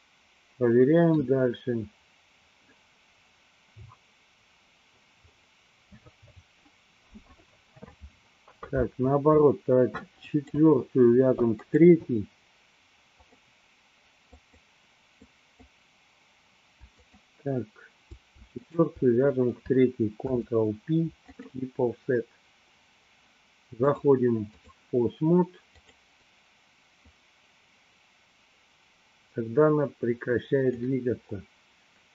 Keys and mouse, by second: 0.0-1.5 middle drag, 10.4 click, 11.9 click, 13.4 click, 14.6 click, 15.4 click, 17.2 shift+click, 18.9 shift+click, 20.4 ctrl+p, 24.0 click, 25.9 click, 27.1-30.9 drag.